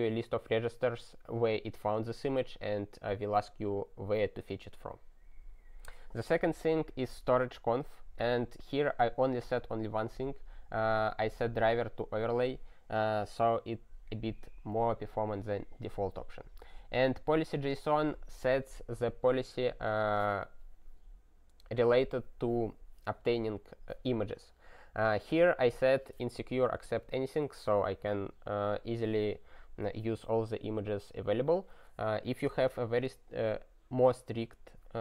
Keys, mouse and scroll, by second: 12.2 click.